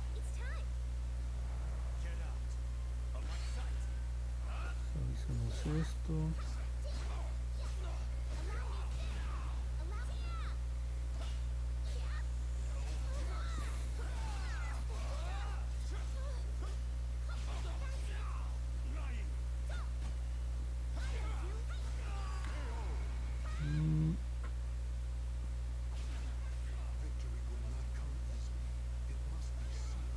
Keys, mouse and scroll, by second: 1.2 click, 1.9 click, 3.0 click, 4.6 click, 5.8 click, 6.5 click, 6.9 click, 7.4 click, 8.5 click, 8.8 click, 9.2 click, 9.6 click, 10.0 click, 10.3 click, 10.6 click, 15.0 click, 15.4 click, 15.7 click, 16.1 click, 16.4 click, 16.7 click, 17.1 click, 17.4 click, 17.8 click, 18.2 click, 18.6 click, 19.0 click, 19.3 click, 19.6 click, 19.9 click, 20.1 click, 24.3 click, 24.7 click, 25.1 click, 25.5 click, 26.3 click, 26.7 click, 27.3 click, 28.1 click, 28.4 click, 28.8 click, 29.3 click, 29.6 click.